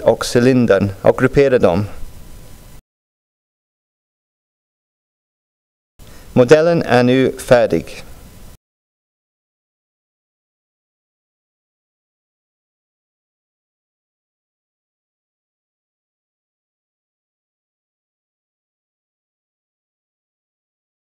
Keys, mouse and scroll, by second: 1.0-3.2 drag, 4.9 click, 9.6 click, 11.9 click, 12.5-14.1 drag, 14.4 click, 15.5 click, 16.9 click, 17.2 click, 18.8 click, 19.7 click.